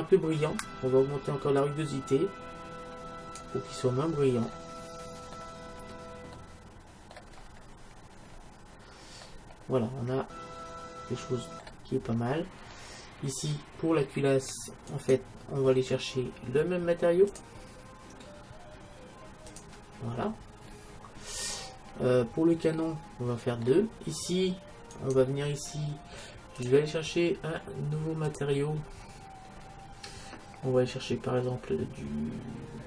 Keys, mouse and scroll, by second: 1.7-3.5 drag, 4.2-7.3 middle drag, 8.1-9.3 middle drag, 10.4 middle click, 12.1-12.7 scroll down 1, 12.7-14.7 scroll up 1, 14.7-15.1 scroll up 1, 15.1-16.7 right drag, 17.4-19.2 drag, 20.7-24.5 middle drag, 25.1-27.0 right drag, 26.7-30.2 drag.